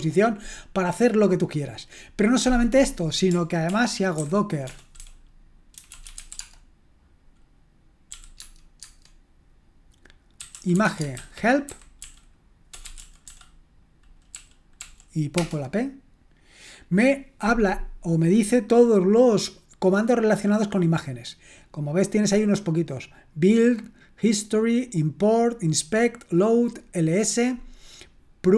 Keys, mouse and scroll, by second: 3.7 ctrl+l, 4.0-6.6 typing, 8.1-8.8 typing, 10.1-13.5 typing, 14.8-15.4 typing.